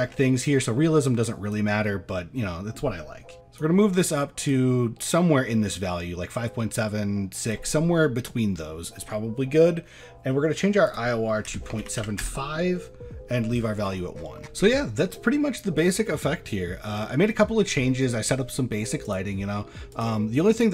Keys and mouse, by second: 1.6-3.7 drag, 4.5-7.6 drag, 9.5 click, 10.9-12.3 drag, 19.1 click, 20.6-20.7 drag.